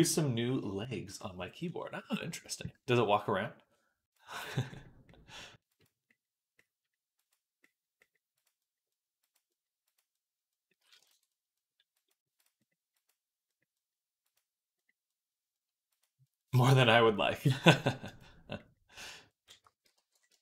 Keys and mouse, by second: 20.0 click.